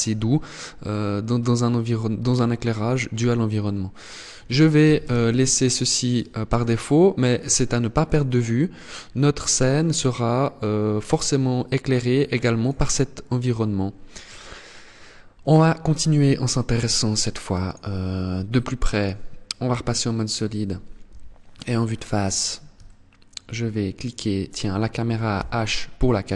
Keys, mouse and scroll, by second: 3.1 click, 5.5 click, 16.7 click, 19.4 scroll up 1, 20.6 KP_1, 21.5-21.9 scroll up 6, 22.4 shift+middle click, 22.9-23.3 shift+scroll up 1, 23.7 right click, 25.1 h.